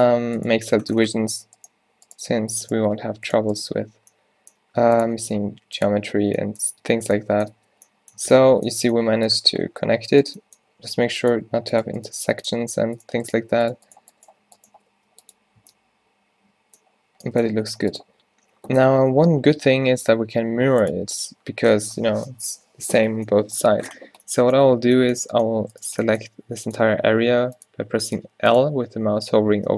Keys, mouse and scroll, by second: 4.0 z, 4.6 g, 5.0 r, 6.0 z, 6.8 Tab, 7.6 Tab, 8.3 Tab, 9.8 Tab, 10.7 g, 12.2 g, 13.4 g, 14.4 z, 14.7 z, 15.0 g, 15.7 Tab, 17.9 a, 20.1 t, 24.7 Tab, 26.3-29.7 typing.